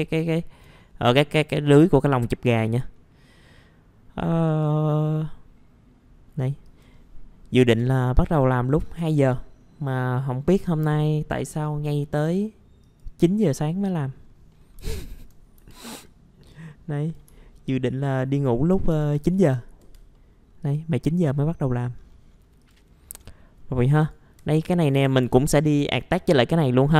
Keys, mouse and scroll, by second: 0.0 middle click, 2.1-2.6 scroll down 1, 2.9 middle click, 4.2 middle click, 4.4 click, 5.0-6.2 middle drag, 6.6 click, 7.0 middle click, 7.8 F4, 11.5 click, 13.8-14.3 scroll up 1, 14.5 middle click, 14.9 alt+middle click, 15.6 F4, 16.0-17.2 drag, 17.3 alt+middle click, 18.8 scroll down 1, 19.4-19.8 scroll down 1, 19.8 F4, 20.1 middle click, 20.6 click, 21.0-21.6 scroll up 1, 21.8-22.6 scroll down 1, 22.6 click, 22.9 scroll up 1, 23.9 click, 24.4 F4, 24.7 middle click, 24.8 scroll down 1, 25.0 F4, 25.6 middle click, 25.7 scroll down 1, 26.1 click, 26.8 scroll up 1.